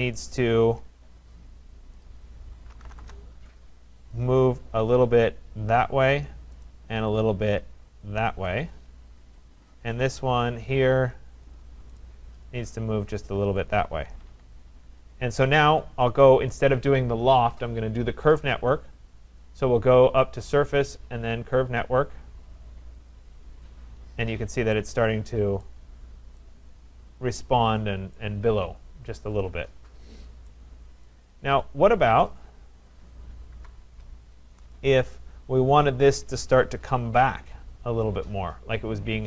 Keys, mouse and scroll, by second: 1.2 scroll, 2.0 click, 2.5-3.5 typing, 2.8 middle click, 4.1 click, 6.2 click, 6.4-7.2 typing, 6.7 right click, 7.2 click, 8.6 click, 9.5 click, 10.0 right click, 10.8 Escape, 11.6 click, 12.0 right click, 12.4 click, 13.7 click, 14.0 Escape, 14.2 Escape, 14.3 Escape, 15.8 click, 20.5 click, 21.8 click, 23.1 click, 23.6 scroll, 24.3-25.0 scroll, 25.6 right click, 26.0-26.4 scroll, 28.2 right click, 29.1 scroll, 30.1 scroll, 31.0 right click, 31.6 click, 31.7-32.3 scroll down 2, 32.4 click, 33.5 Delete, 35.1 middle click, 35.1 right click.